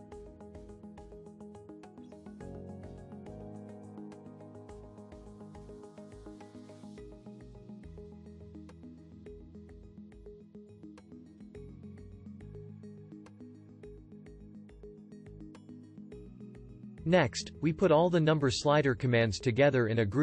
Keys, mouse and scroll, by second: 8.0 ctrl+g.